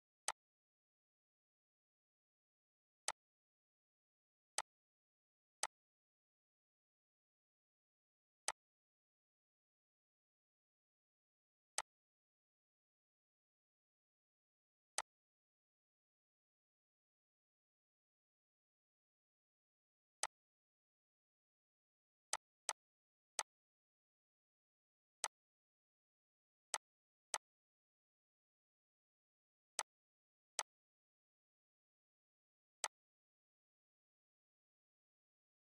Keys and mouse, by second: 7.0 alt+Num_Lock, 8.1-11.4 alt+drag, 11.4-14.6 alt+drag, 14.6-26.3 alt+drag, 29.4 click, 32.5 click, 35.3-35.6 alt+drag.